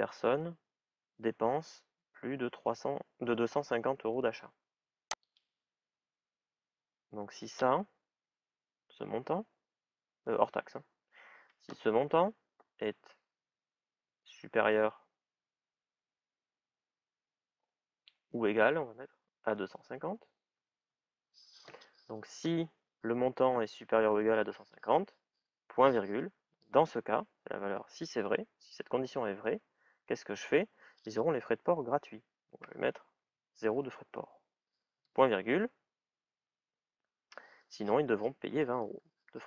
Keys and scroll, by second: 13.8 shift+<, 19.3-20.9 typing, 33.0 shift+à, 38.2 shift+é.